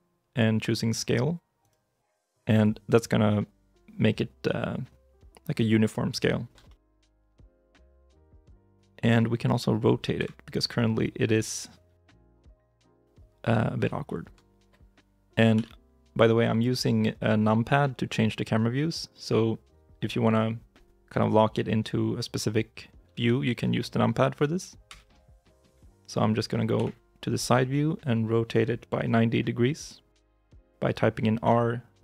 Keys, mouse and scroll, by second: 6.5 shift+middle click, 7.3 shift+middle click, 7.7 shift+middle click, 10.0 KP_3, 12.2 KP_1, 13.9 shift+i, 14.5 shift+middle click, 15.4 KP_5, 16.4-18.7 scroll, 24.7 KP_3, 26.6 KP_1, 31.3 r.